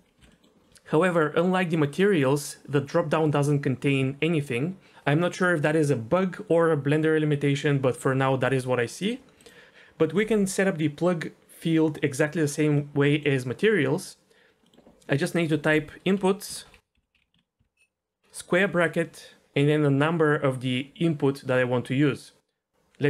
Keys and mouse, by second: 0.2 Delete, 0.2 Insert, 0.3 middle click, 0.6 middle click, 1.9-3.0 drag, 9.0 click, 9.4 click, 12.7-13.3 middle drag, 14.6 middle click, 15.2-23.0 drag.